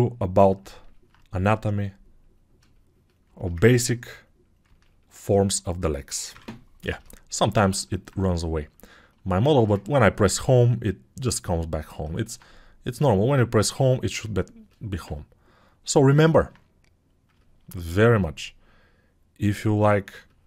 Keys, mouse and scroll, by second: 6.3 Home.